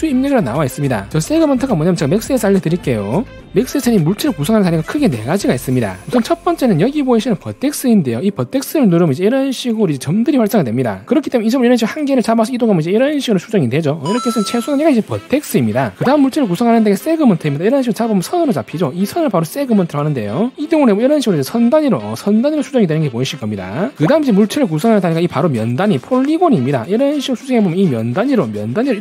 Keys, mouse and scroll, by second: 9.1 click, 12.0 click, 12.4 middle click, 13.2-14.2 drag, 18.6 click, 19.1 middle click, 21.8 click, 22.8-23.9 alt+middle drag, 26.2 click, 26.6 alt+middle click, 27.8 click, 28.8-29.0 alt+middle drag.